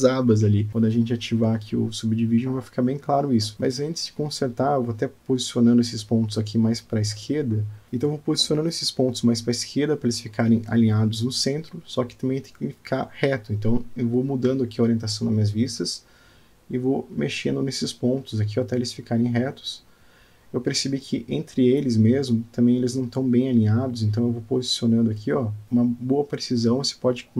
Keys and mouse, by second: 0.6 click, 1.2 click, 1.9 alt+z, 2.2 click, 2.8 alt+z, 3.7 click, 5.7 g, 7.8 g, 11.9-13.7 middle drag, 14.4 click, 15.8-18.0 middle drag, 18.8 click, 20.0 g, 24.6 click, 26.2 click, 26.3 g.